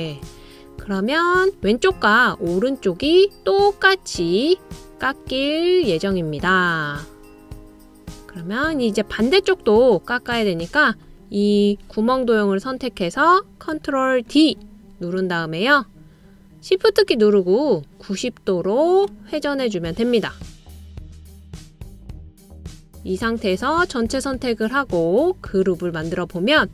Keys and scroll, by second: 14.8 super+o.